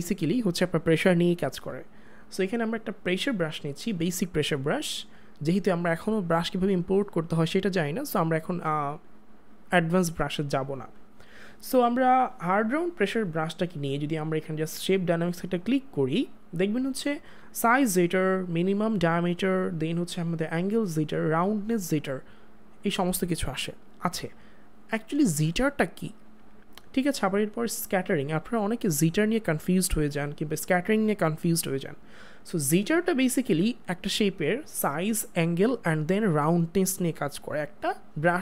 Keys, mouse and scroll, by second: 3.1 click, 13.0 click, 13.1 click, 15.6 click.